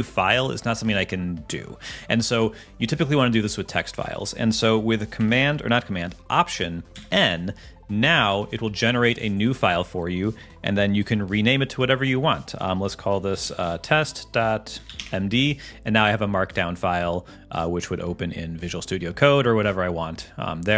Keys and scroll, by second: 6.9 alt+n, 8.1 shift+Return, 14.0 ., 15.0 Return.